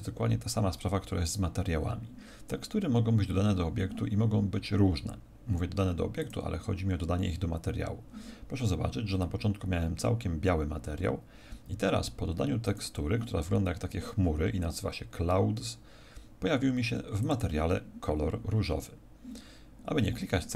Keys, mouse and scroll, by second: 6.1 click, 12.6 click, 17.1 click.